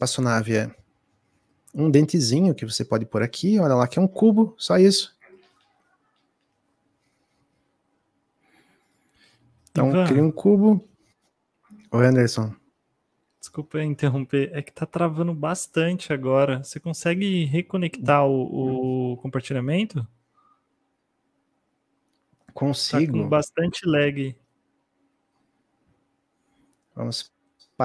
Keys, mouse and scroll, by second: 2.4 s, 13.8-22.0 shift+drag.